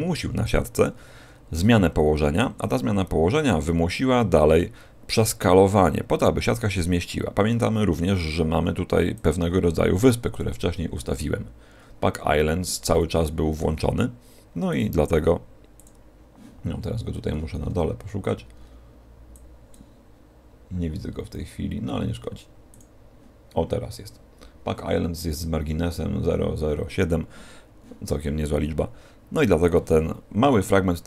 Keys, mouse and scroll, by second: 9.1 click, 12.8 a, 13.1 a, 14.6 click, 16.7 scroll down 3, 19.3 click, 19.3-19.6 scroll down 22, 21.1-22.6 scroll down 4, 22.6 click.